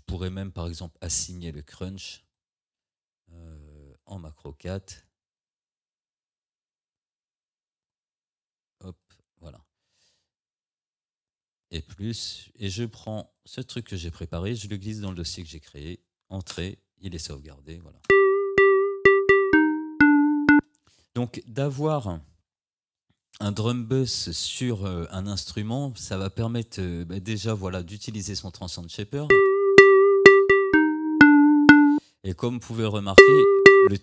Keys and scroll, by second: 16.6 Return, 18.1 space, 20.6 space, 29.3 space, 32.0 space.